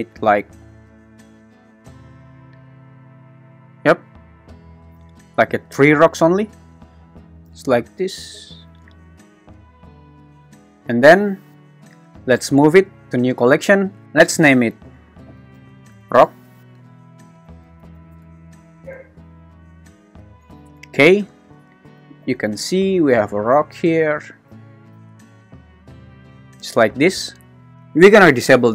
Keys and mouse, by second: 1.6 click, 12.3 m, 16.1 k, 16.6 BackSpace, 21.8 g, 22.2 x, 23.2-24.5 drag, 24.5 g, 24.9 x, 25.9 click, 27.0 `.